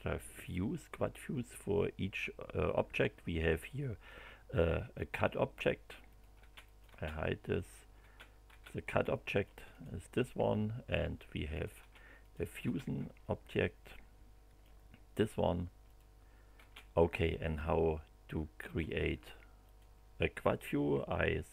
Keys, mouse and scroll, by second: 6.1 click, 6.4 space, 6.6 click, 7.6 click, 8.0 space, 9.1 middle click, 9.8 click, 11.5 click, 11.8 space, 12.2 click, 12.6 space, 13.2-14.8 middle drag, 15.8 click, 16.5 space, 17.5-18.9 middle drag, 19.6 click.